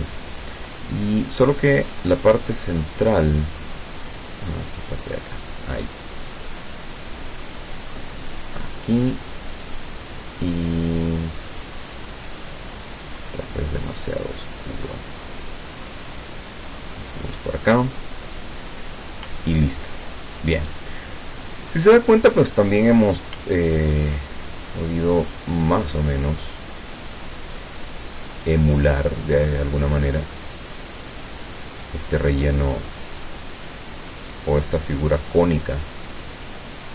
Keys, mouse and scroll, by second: 1.7 click, 4.5-8.1 drag, 9.4 click, 13.0 click, 14.0-17.3 drag, 19.5-20.5 ctrl+scroll down 2, 21.5 click, 23.7-24.1 ctrl+scroll up 2, 24.5 ctrl+click, 25.3 click, 26.5-29.6 drag, 30.5-32.7 drag, 33.9-36.9 drag.